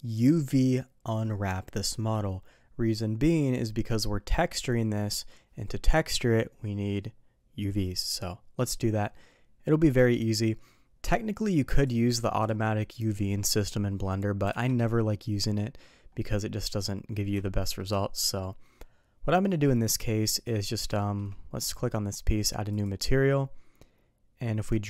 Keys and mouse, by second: 11.8 click, 17.4-17.8 shift+middle drag, 18.2 middle click, 20.3 click, 21.0 shift+middle drag, 22.7 click, 24.7 click.